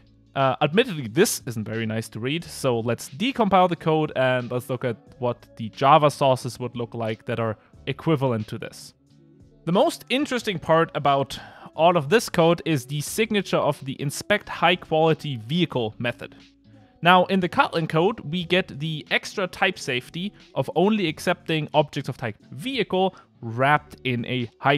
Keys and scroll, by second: 13.0 super+f.